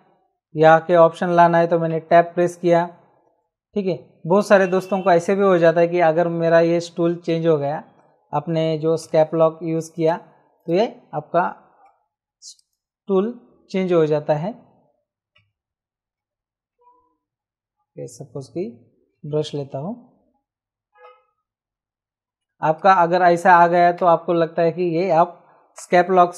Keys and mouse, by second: 1.8 Tab, 4.4 click, 6.4 click, 9.0 Caps_Lock, 9.9 click, 11.8 v, 12.6 click, 13.7 Escape, 15.3 Caps_Lock, 16.1 Tab, 19.6 b, 21.0 Caps_Lock, 22.6 click, 24.0 ctrl+z, 25.7 Caps_Lock.